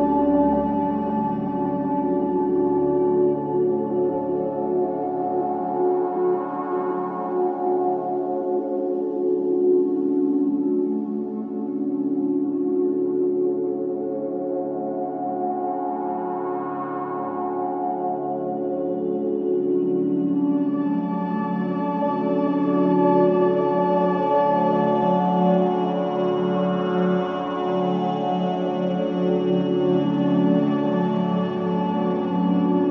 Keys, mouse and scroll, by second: 0.6 click, 5.1 click, 8.1 click, 10.4 click, 15.4 e, 20.1-21.9 scroll up 3, 22.2 shift+middle click, 22.7-23.1 scroll up 1, 23.1-24.6 shift+middle drag, 24.8 l, 25.3 click, 28.2 click, 29.0-31.0 drag, 32.5-32.9 drag.